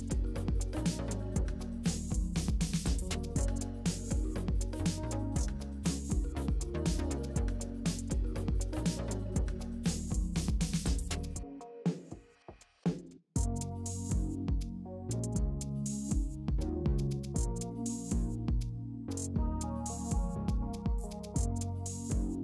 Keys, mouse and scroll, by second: 1.3 middle click, 1.4 scroll down 2, 1.5 click, 3.2 middle click, 3.5 click, 5.1 middle click, 5.4 click, 6.0-12.0 middle drag, 14.7-17.9 drag.